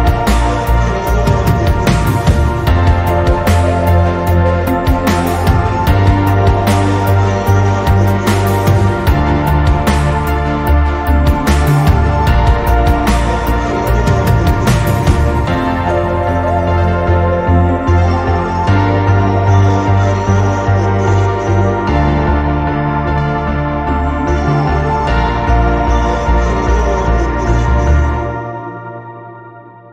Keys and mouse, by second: 0.1 click, 0.8 click, 1.3 click, 2.1 click, 3.7 click, 4.9 click, 5.7 click, 6.9 click, 13.1 click, 21.1 click, 22.2 middle click, 23.2 n, 24.7-28.3 drag, 28.7 n, 29.8-29.9 middle drag.